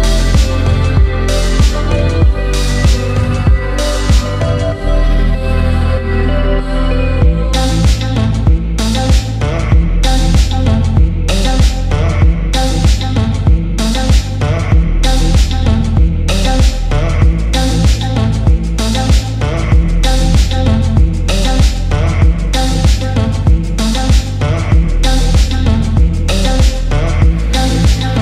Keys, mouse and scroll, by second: 8.8 click, 9.8 click, 11.6 click, 12.4 click, 13.1 click, 15.0 KP_1, 16.5 shift+a, 21.4-23.0 drag, 22.6 KP_0, 24.4-27.4 drag.